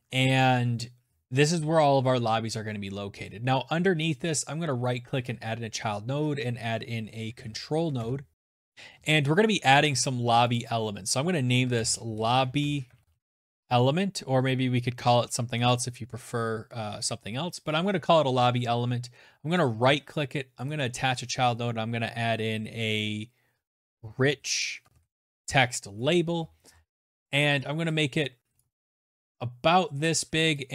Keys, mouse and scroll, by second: 1.6 click, 2.3 right click, 3.9 click, 6.5 Up, 6.8 Down, 7.0 Return, 8.3 click, 8.3 scroll, 9.6 click, 9.7 click, 10.5-13.1 typing, 11.6 middle click, 12.0 middle click, 16.0 Return, 18.6 right click, 19.7 click, 22.5-24.4 typing, 24.4 Return, 25.0-27.4 scroll, 25.9 right click, 25.9 BackSpace, 27.6 click, 27.7 ctrl+z, 29.0 click, 29.5 click.